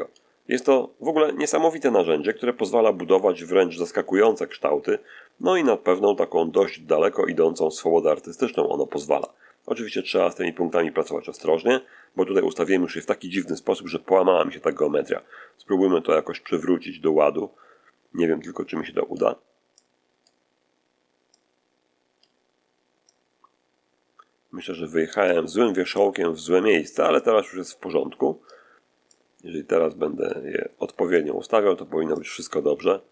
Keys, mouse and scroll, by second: 1.7-3.9 drag, 4.1-5.7 drag, 6.5-8.6 drag, 9.1-11.5 drag, 13.8-19.3 drag, 19.7-20.3 drag, 21.3 click, 23.0-25.3 drag, 25.9 click, 27.1-28.6 drag, 29.0-30.4 drag, 31.1 click, 32.1-33.1 drag.